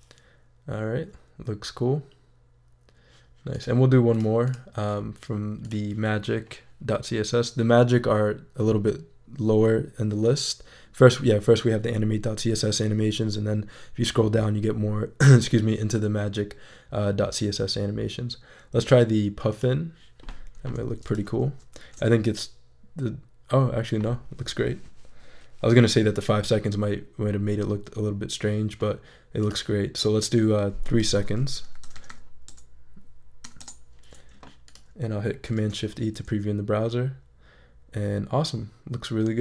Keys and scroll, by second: 21.7 shift+super+e, 31.4-33.4 typing, 33.6 Return, 35.5 shift+super+e.